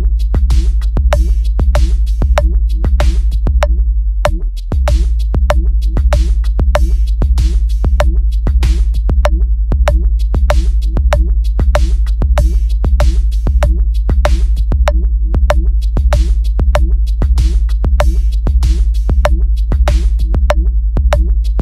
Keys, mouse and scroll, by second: 1.1 click, 2.6 click, 3.5 click, 4.3 click, 5.5 click, 6.1 click, 8.4 click, 8.9 click, 10.4 click, 12.2 click, 12.7 click, 13.4 click, 14.0 click, 16.3 click, 16.7 click, 18.0 click.